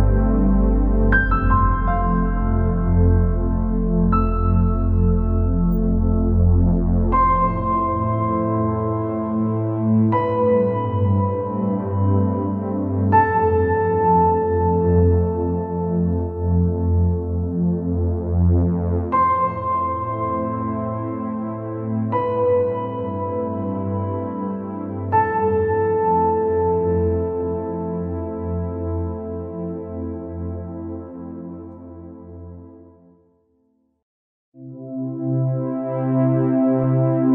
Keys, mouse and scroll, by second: 1.5 click, 2.7 scroll down 4, 3.2 scroll up 3, 4.5-6.6 drag, 6.6 scroll down 2, 6.8 middle click, 7.4 click, 8.2-9.6 drag, 10.4-11.7 drag, 11.7-12.3 scroll up 4, 12.5 scroll down 1, 12.6 middle click, 13.6-14.0 scroll up 1, 15.4 click, 19.8 alt+click, 20.8 scroll down 3, 21.0-24.1 middle drag, 24.7 alt+e, 35.4 click, 35.7 scroll down 3, 35.8 middle click, 36.6 scroll up 3, 37.2-37.3 middle drag.